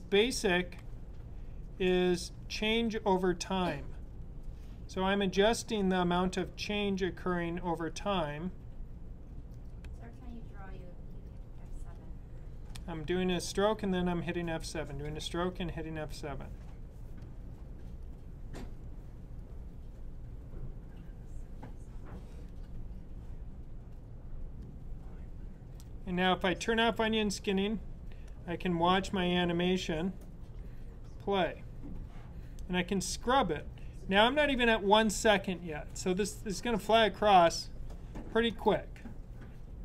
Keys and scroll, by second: 0.6 F7, 2.2 F7, 4.0 F7, 6.0 F7, 7.9 F7, 9.7 F7, 11.4 F7, 13.2 F7, 14.9 F7, 16.5 F7, 18.0 F7, 19.3 F7.